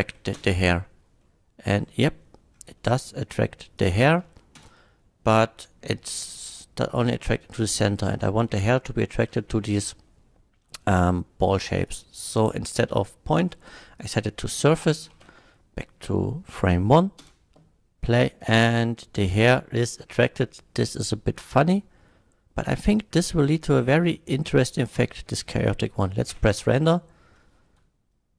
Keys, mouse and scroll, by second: 0.0 shift+Left, 0.3 space, 1.2-2.2 middle drag, 2.7-3.5 middle drag, 3.7 click, 4.3 shift+middle click, 4.6 space, 6.9 middle drag, 8.2 middle drag, 9.3 shift+middle drag, 11.8 shift+click, 14.0 click, 14.5 middle drag, 15.2 shift+Left, 17.2 space, 18.7-20.4 middle drag, 20.5 middle click, 20.8 middle click, 24.1-24.6 middle drag, 25.4 space, 25.6 middle drag, 26.3 F12.